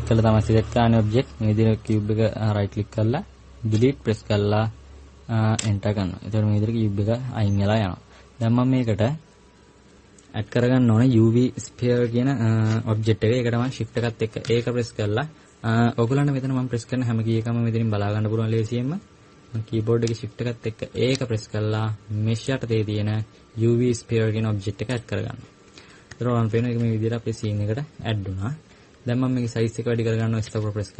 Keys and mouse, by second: 7.4-13.6 middle drag, 14.6 shift+a, 21.0 shift+a, 26.2 KP_Add, 26.4 KP_Add, 26.6 KP_Add, 26.7 KP_Add, 30.5 s.